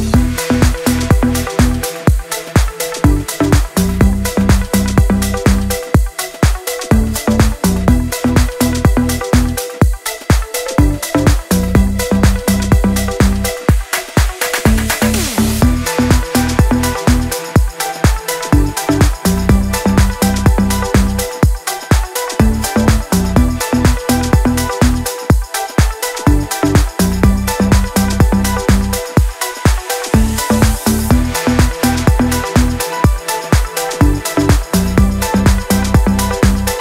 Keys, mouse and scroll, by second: 0.8 click, 2.8-6.8 alt+drag, 6.8-20.1 alt+drag, 21.8 click, 23.5 ctrl+l, 24.5-33.8 drag, 33.8-36.8 alt+drag.